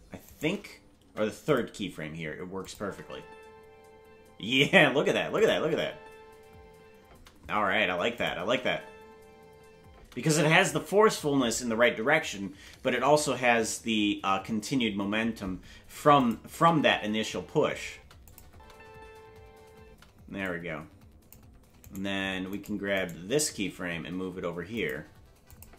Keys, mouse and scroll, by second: 0.3 right click, 1.0 Delete, 2.6 click, 2.8 space, 5.3 space, 5.3 click, 5.5 space, 7.2 space, 8.1 click, 8.3 space, 10.4 space, 16.2 click, 16.4 space, 18.2 click, 18.2 space, 18.5 space, 20.4-21.3 drag, 20.4 space, 22.5 right click, 23.6 g, 25.5 click, 25.6 space.